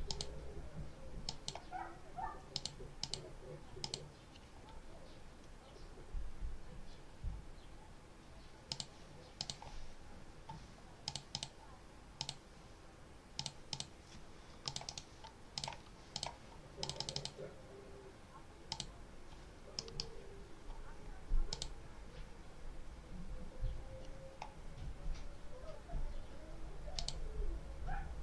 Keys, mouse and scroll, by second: 1.1 click, 2.4 click, 2.9 click, 3.7 click, 8.6 click, 9.3 click, 10.0 scroll down 2, 10.9 click, 12.1 click, 13.3 click, 14.5 click, 15.4 click, 16.0 click, 16.7 click, 18.6 click, 19.7 click, 21.4 click, 26.9 click.